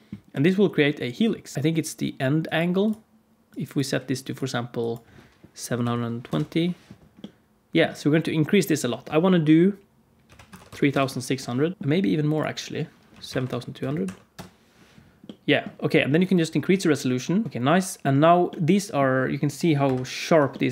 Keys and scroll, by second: 10.6 0, 11.7 0, 13.4 0, 13.8 BackSpace, 19.8 KP_7.